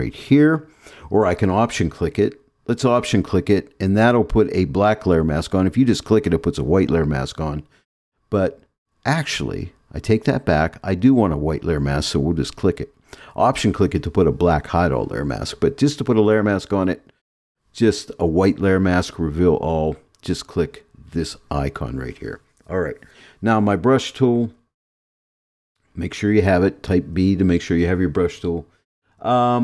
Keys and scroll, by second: 27.1 b.